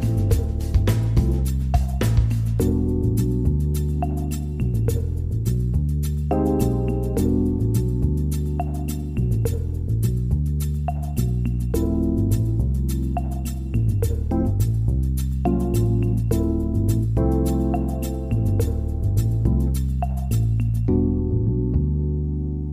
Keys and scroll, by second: 11.9 ctrl+-, 15.8 Caps_Lock, 15.9-17.3 typing, 22.5 ctrl+=.